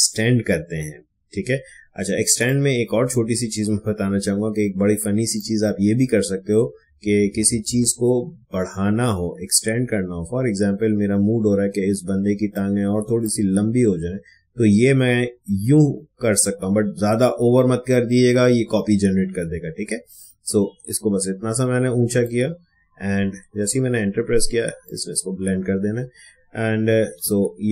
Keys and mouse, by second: 2.1 space, 2.4 click, 2.6 space, 5.6-23.2 drag, 24.8 click, 27.2 ctrl+alt+z.